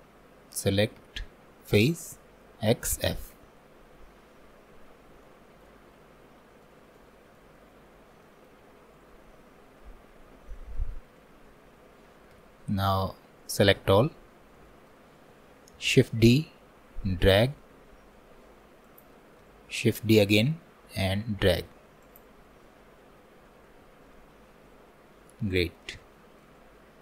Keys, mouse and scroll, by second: 4.2 scroll down 1, 4.9-5.3 scroll down 3, 5.3-7.8 shift+middle drag, 7.8-8.2 scroll up 4, 8.3-12.4 shift+middle drag, 12.4 3, 14.4 scroll down 2, 14.7-15.8 shift+middle drag, 15.8 shift+d, 19.7 shift+d, 23.9 Tab, 24.8-25.1 scroll down 1, 25.3-26.6 shift+middle drag, 26.6-27.0 scroll up 2.